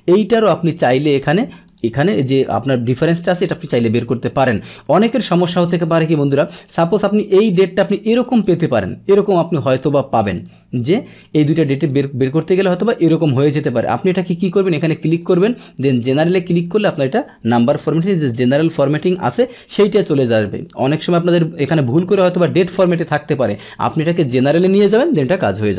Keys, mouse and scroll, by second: 6.5 click, 7.8 click, 9.4 click, 10.4 click, 11.4-13.1 drag, 15.2-16.8 drag, 21.8 click, 23.8 click, 25.3 click.